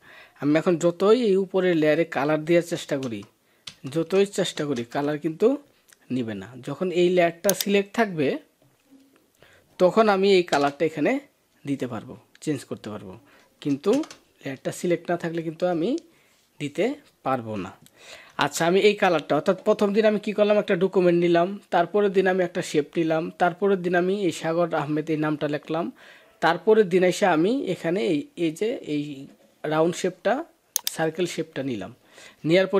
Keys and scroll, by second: 2.8 alt+BackSpace, 4.6 ctrl+BackSpace, 10.3 ctrl+BackSpace, 13.7 alt+BackSpace, 18.1 ctrl+d.